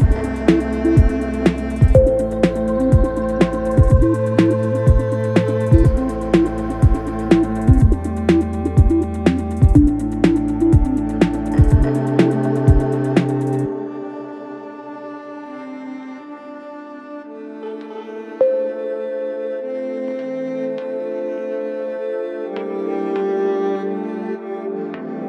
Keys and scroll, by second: 5.7 5, 6.1 4, 7.1 5, 9.7 4, 14.7 ctrl+z, 17.4 5, 18.4 ctrl+z, 24.6 4.